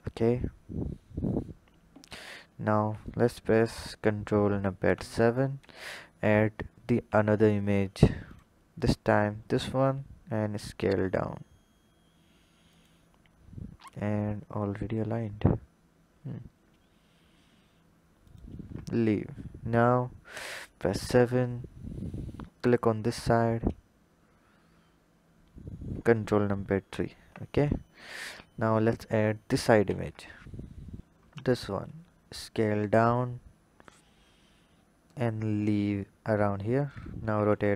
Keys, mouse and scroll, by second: 4.8 ctrl+KP_7, 7.0 shift+a, 9.4 s, 13.4-15.5 scroll up 1, 16.2 s, 20.3 KP_7, 22.6 click, 26.8 ctrl+KP_3, 29.8 shift+a, 31.3 scroll up 2, 31.9 s, 37.2 r.